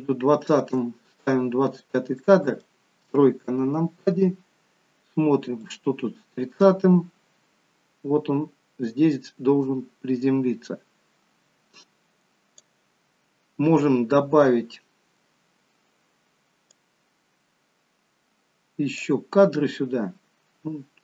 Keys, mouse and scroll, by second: 2.4 middle click, 3.4 KP_3, 5.8 click, 17.2 click.